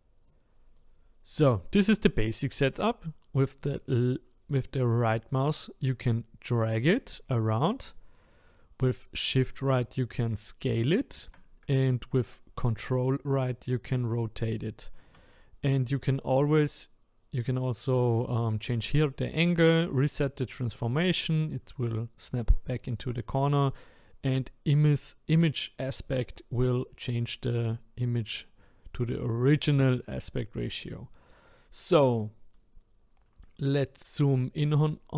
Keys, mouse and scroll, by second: 0.3-3.4 drag, 3.6-6.6 right drag, 7.9-14.8 shift+right drag, 20.7-23.9 drag, 26.0-29.0 drag, 31.8-33.8 scroll up 5, 33.8-35.1 shift+right drag.